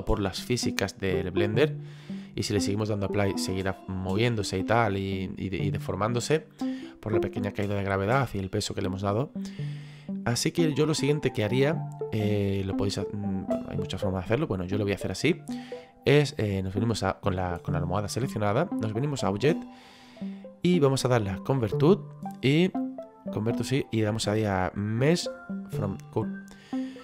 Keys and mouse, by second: 19.2 click.